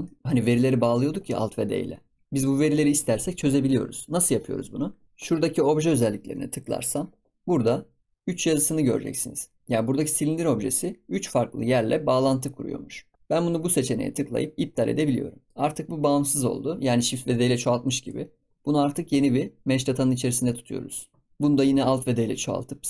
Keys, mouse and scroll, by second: 0.0 shift+middle drag, 0.2-2.2 scroll down 3, 5.0 click, 6.8 click, 14.2 click, 15.0 scroll down 1, 15.2 scroll up 2, 15.5 scroll down 1, 15.5 middle click, 15.5-16.0 scroll up 4, 16.0-17.8 scroll down 1, 17.8 ctrl+s, 18.3-19.0 scroll down 2, 19.0 click, 20.8 click, 21.2-22.1 middle drag, 22.1 alt+d.